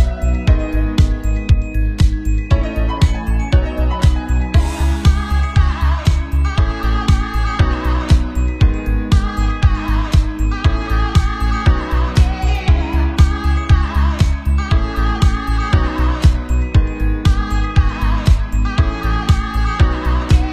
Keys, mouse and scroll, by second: 0.8-2.0 shift+drag, 1.3 Tab, 1.4 Tab, 1.9 Tab, 2.0-2.4 middle drag, 2.0 v, 2.4 click, 3.1 ctrl+a, 3.1 ctrl+middle click, 3.6-5.3 typing, 3.7 click, 3.8 middle click, 5.6 middle click, 6.1 click, 6.5 r, 6.8-7.1 drag, 7.1-7.6 drag, 7.6-9.1 middle drag, 7.6-8.7 typing, 9.1 click, 9.2 middle click, 9.3 click, 9.4 right click, 9.5-10.0 drag, 10.0 middle click, 10.0-10.6 typing, 10.4 click, 10.7 middle click, 10.8 click, 11.0 middle click, 11.2-13.0 drag, 13.1-14.6 drag, 14.6-15.3 middle drag, 15.3 shift+d, 15.3 click, 15.4 middle click, 15.5 click, 15.6 r, 15.6 middle click, 15.7 click, 15.9 middle click, 15.9 b, 16.1-16.5 ctrl+drag, 16.3 ctrl+j, 16.6 ctrl+a, 16.6 ctrl+middle click, 16.7 Tab, 16.7 middle click, 17.1 alt+n, 17.4 Tab, 17.4 click, 17.8-19.5 middle drag, 18.1-19.5 drag, 18.1-19.5 right drag, 19.5-20.5 typing, 19.6 click.